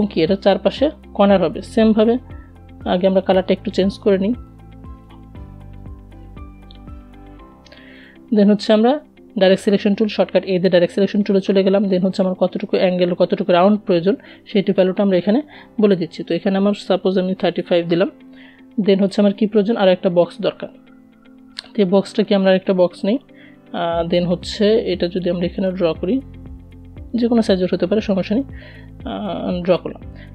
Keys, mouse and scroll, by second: 1.3-6.2 drag, 7.6 a, 12.8 click, 14.1 BackSpace, 17.4 click, 20.6 click, 23.2-29.6 drag.